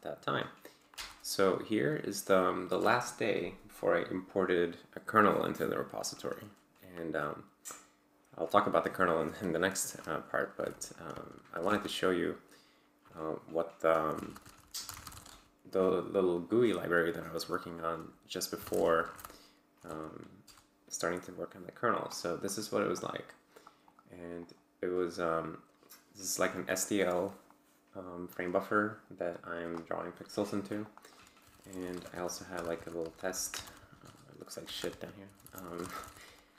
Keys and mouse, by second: 0.9 Return, 10.6-12.1 typing, 11.2 ctrl+c, 13.9-15.4 typing, 17.9-19.7 typing, 19.8 Tab, 20.4 Return, 22.9 click, 23.8 click, 24.4 click, 24.9-25.7 drag, 27.5 click, 29.3-29.9 drag, 30.8 click, 31.2-33.6 typing, 34.0 Return, 34.6 Return, 35.0-36.5 typing.